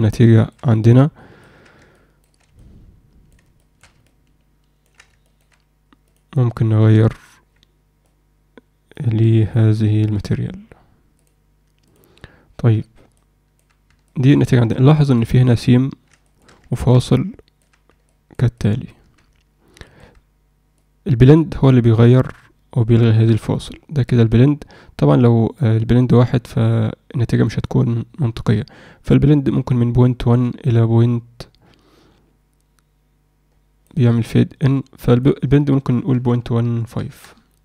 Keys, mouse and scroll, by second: 0.3 alt+shift+middle click, 0.8 ctrl+alt+middle click, 1.9 alt+shift+middle click, 2.5-3.3 alt+middle drag, 3.6 alt+shift+middle click, 4.0-4.8 ctrl+alt+middle drag, 5.2 shift+middle click, 6.0 drag, 14.1-14.7 alt+middle drag, 14.9 alt+shift+middle click, 16.7 ctrl+alt+middle click, 17.1-17.6 alt+middle drag, 18.1 alt+middle click, 18.5-18.9 alt+middle drag, 19.8 alt+middle click, 20.7-33.8 drag, 35.1-37.1 drag.